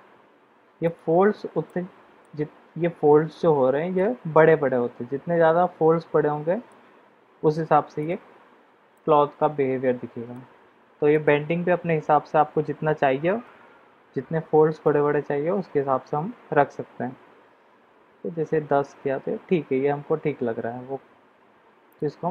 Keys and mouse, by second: 1.0 click, 1.6-2.2 middle drag, 4.0-6.6 middle drag, 8.0 click, 8.9-10.3 middle drag, 11.1-14.0 drag, 14.8 click.